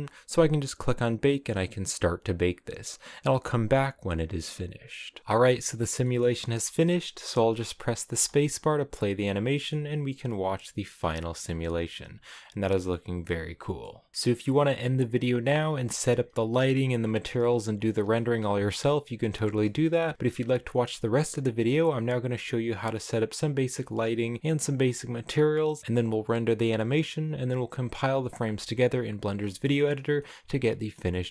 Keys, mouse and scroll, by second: 5.9-8.0 shift+middle drag, 8.0 space, 8.7-11.9 middle drag, 11.9-12.9 scroll up 4, 12.9-19.7 middle drag, 19.7-21.2 scroll up 1, 21.2-25.8 scroll down 1, 25.8-31.3 middle drag.